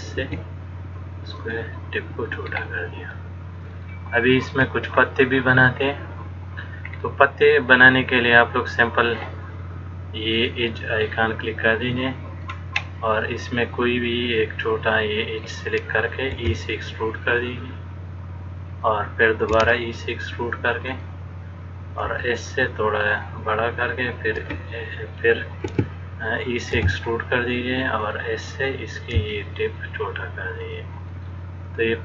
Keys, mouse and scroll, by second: 0.4 s, 4.0 shift+middle click, 5.1-6.0 scroll down 1, 6.0 click, 6.0 scroll down 1, 7.1-7.5 scroll down 1, 10.5 click, 12.7 scroll up 1, 14.1-15.0 scroll up 1, 16.6 e, 19.8 e, 22.2 s, 24.6 s, 26.9 e, 29.4 s.